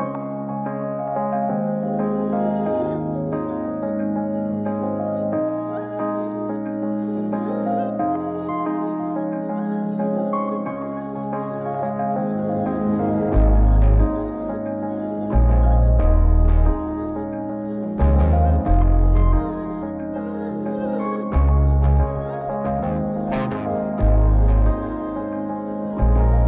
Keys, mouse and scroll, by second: 0.6 click, 3.8 click, 6.4 click, 7.0 ctrl+space, 7.6-7.9 scroll down 4, 8.6 click, 9.7 click, 11.3 click, 12.5 click, 14.1 click, 14.5 g, 17.5 click, 18.4-18.9 scroll down 3, 19.0 ctrl+space, 20.5-21.2 scroll up 4, 21.2 middle click, 21.8 scroll up 2, 21.9 middle click, 22.8 click, 23.4 click, 24.5 scroll down 1, 24.7 middle click, 25.5 click, 26.1-26.4 middle drag.